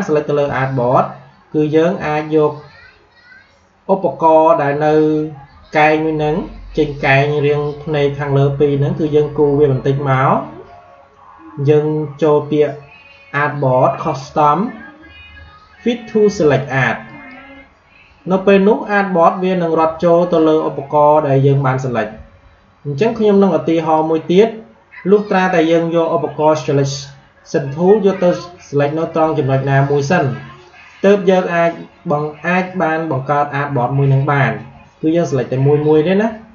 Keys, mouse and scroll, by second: 8.9-12.5 drag, 13.9 click, 16.9 click, 22.0 v, 23.7 click, 28.2 click.